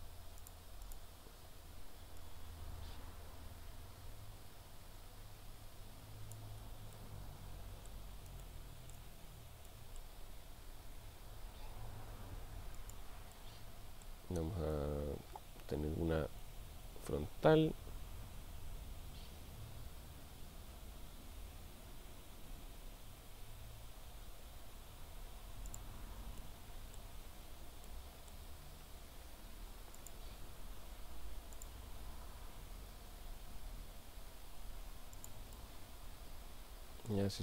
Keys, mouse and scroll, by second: 0.8 click, 7.0-8.1 middle drag, 8.4-9.0 shift+middle drag, 9.7-10.4 middle drag, 10.4 r, 13.3-14.3 middle drag, 16.7 shift+a, 26.4-27.1 middle drag, 27.9-28.5 middle drag, 29.0 g, 30.1 click, 31.6 click, 32.8 r, 35.2 click, 35.9-37.3 middle drag.